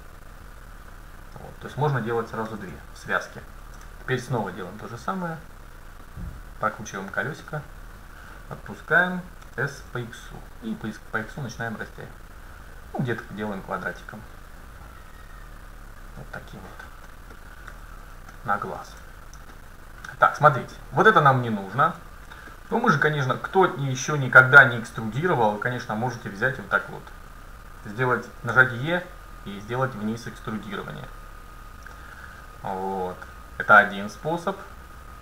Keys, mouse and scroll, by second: 2.6 a, 3.7 ctrl+r, 9.5 s, 17.1-17.4 scroll up 1, 17.4-18.6 middle drag, 17.8 a, 19.6-23.9 middle drag, 22.6-23.0 scroll up 1, 24.5 middle click, 24.5-29.3 right drag, 28.7 e.